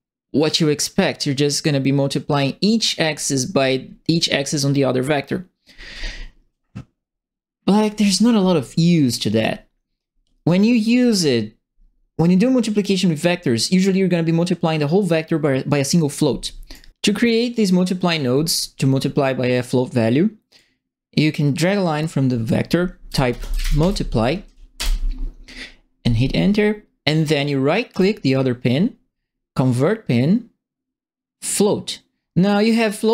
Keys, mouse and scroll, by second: 16.7 right click, 20.5-22.0 drag, 22.8-24.3 typing, 24.7 Return, 27.9 right click.